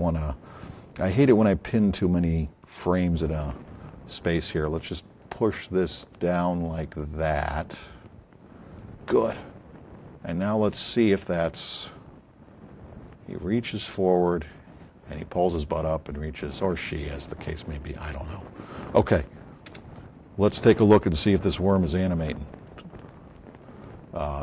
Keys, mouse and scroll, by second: 5.2 click, 16.5-18.1 drag, 19.7 KP_Decimal, 21.8-22.8 alt+drag, 23.0 alt+drag.